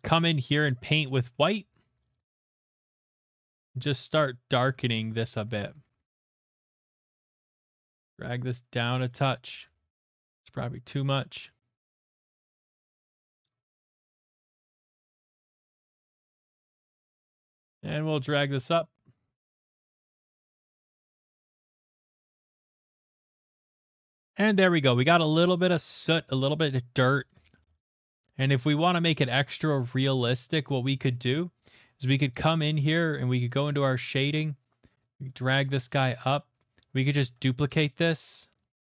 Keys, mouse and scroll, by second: 0.8 [, 1.0 [, 1.8 click, 1.8 [, 2.0 click, 2.1 click, 2.2 click, 2.5 middle click, 2.5 click, 2.7 click, 2.9 click, 3.1 click, 3.9 click, 4.3 click, 4.5-5.9 typing, 7.4 click, 7.6 click, 9.0 click, 9.5 ctrl+z, 10.3 click, 11.5 click, 11.9 click, 12.2 click, 12.4 click, 12.9 click, 13.2 click, 13.4 click, 13.7 click, 14.0 click, 14.3 click, 14.7 click, 14.9 click, 15.2 click, 15.5 click, 15.7 click, 16.5 middle click, 16.6 scroll, 16.9 click, 16.9 middle click, 18.0 click, 18.9 click, 19.3 click, 19.5 click, 19.7 click, 20.2 click, 20.4 click, 21.0 click, 21.2 click, 21.9 click, 22.1 click, 22.6 middle click, 22.6 scroll, 23.6 middle click, 23.8 middle click, 24.2-24.5 shift+middle click, 24.8 middle click, 25.5 shift+middle click, 26.1 middle click, 27.2 middle click, 27.9 middle click, 29.0 shift+middle click, 29.2 click, 29.6 middle click, 30.4 click, 31.0 middle click, 31.3 middle click, 32.6 middle click, 33.6 click, 36.1 middle click, 36.6 click, 37.2 d, 38.4 click, 38.7 middle click.